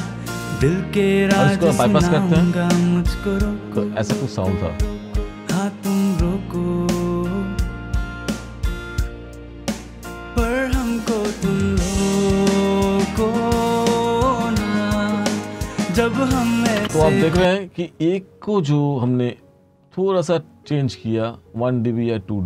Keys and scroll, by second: 1.9-5.0 typing, 16.9 space.